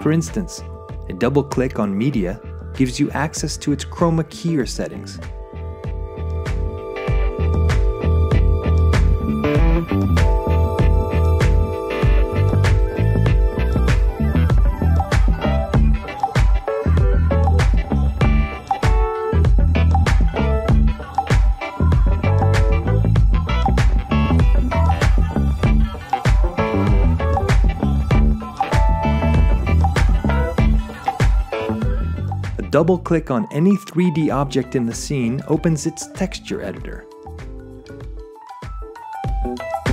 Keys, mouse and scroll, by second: 1.1 scroll, 1.7 scroll, 5.6 click, 9.6-10.6 drag, 11.6 drag, 13.9 click, 14.5 drag, 16.5 shift+scroll, 18.1 shift+scroll, 18.3-18.8 shift+scroll, 21.4-22.4 shift+drag, 23.3-24.0 drag, 25.0-26.1 drag, 26.9 click, 28.0 click, 29.2-30.1 drag, 34.2 click, 36.8 click, 39.7 click.